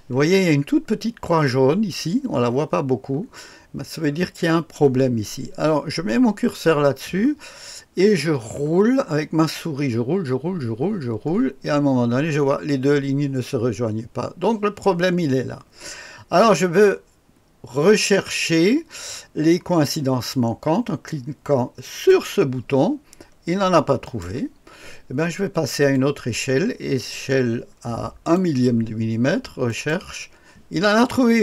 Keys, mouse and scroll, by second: 1.4-2.8 scroll up 2, 2.8-6.4 scroll down 2, 6.4-21.8 scroll up 3, 21.8 click, 24.0 click, 25.9-28.4 drag, 29.7 click.